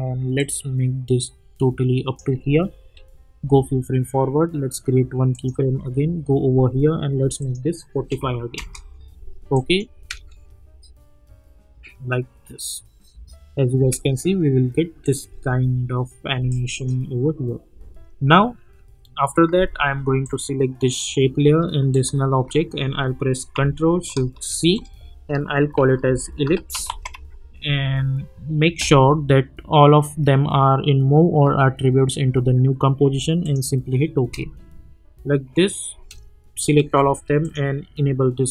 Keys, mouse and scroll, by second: 0.4-2.2 drag, 2.7 k, 3.4 k, 5.3 click, 5.7 k, 7.4 click, 8.5 Return, 9.5 click, 9.9 space, 13.8 space, 15.0 click, 15.3 u, 16.5-17.1 drag, 18.7 F4, 20.2 click, 24.5 ctrl+shift+c, 25.5-27.6 typing, 33.4 click, 34.2 space, 36.8 ctrl+a, 37.4 click.